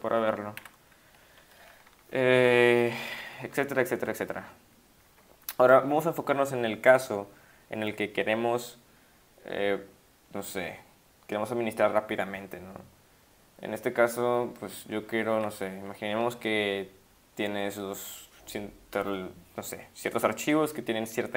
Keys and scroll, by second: 0.6 q, 1.8 Up, 2.4-3.3 Up, 14.9 Up, 15.1 Up, 15.2 Up, 15.3 Up.